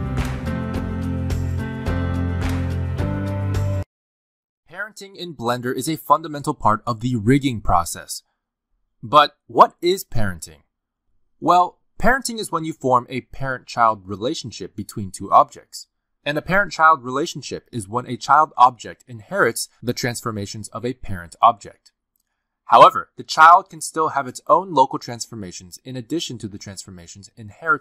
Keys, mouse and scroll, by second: 11.8 click, 12.0 shift+d, 12.7 click, 12.8 shift+click, 13.2 ctrl+p, 13.8 click, 14.1 r, 15.2 g, 15.7 click, 15.9 g, 16.9 click, 17.0-22.2 typing, 17.6 click, 18.4 click, 19.0 click, 19.6 click, 20.3 click, 21.2 click, 23.3-27.7 typing, 24.9 click, 25.7 click, 26.5 click, 27.6 click.